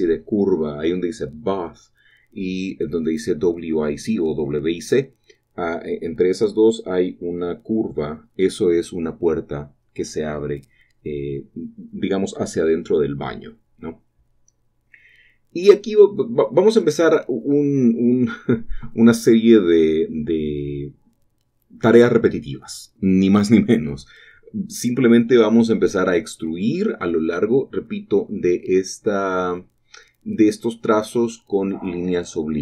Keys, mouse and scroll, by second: 0.1-3.6 middle drag, 3.6 typing, 8.1-10.7 drag, 11.6-16.2 drag, 16.2 typing, 17.6-18.8 drag, 21.8-24.9 shift+middle drag, 24.9-25.5 scroll down 1, 25.5 shift+middle click, 29.4 shift+middle click, 30.0 shift+middle click, 30.2 shift+middle click, 30.6-32.6 shift+middle drag.